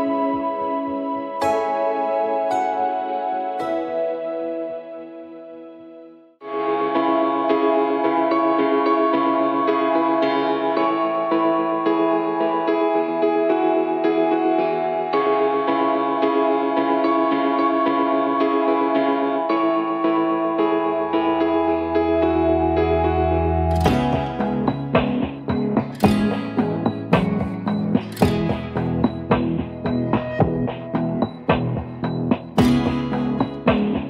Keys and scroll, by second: 0.0-0.7 typing, 5.7 v, 9.3-10.1 typing, 10.4 Return, 13.8-15.9 typing, 15.1 Tab, 17.6 Return, 20.8 Return, 21.3 Return, 23.3-24.7 typing, 23.4 Return, 31.9-33.1 typing, 32.7 Tab, 32.8 Tab.